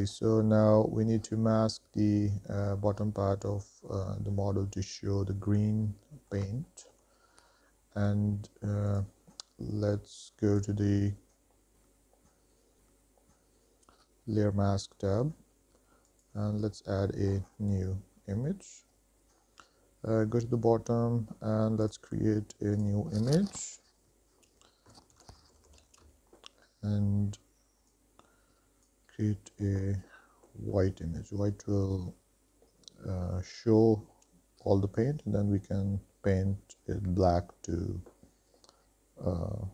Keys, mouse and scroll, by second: 5.8-6.5 middle drag, 6.9 shift+middle drag, 9.1 click, 10.9 click, 16.3 click, 18.6-19.3 scroll down 1, 19.3 scroll down 2, 22.0-39.7 drag.